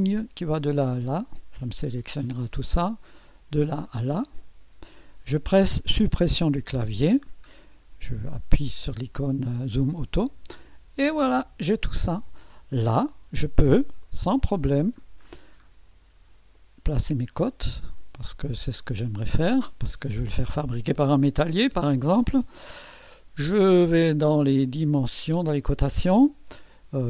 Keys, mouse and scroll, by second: 0.8 click, 3.1 click, 4.1 click, 6.1 Delete, 6.8-7.5 scroll down 4, 9.7 click, 14.0-15.1 middle drag, 15.2-16.3 scroll up 6, 16.6 middle click, 17.3-18.0 scroll up 2, 18.2 middle click, 19.2 scroll up 1.